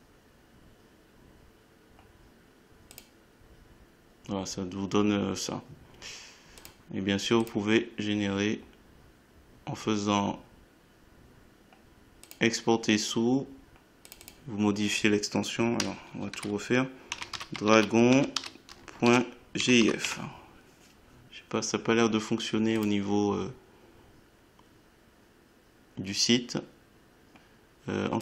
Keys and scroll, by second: 22.0 Home, 22.6 shift+End, 23.1-26.8 typing.